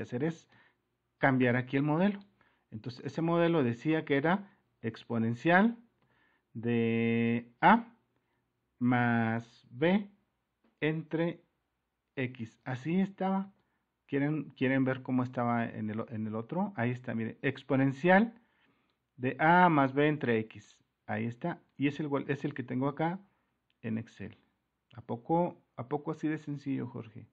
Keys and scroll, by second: 0.5 super++.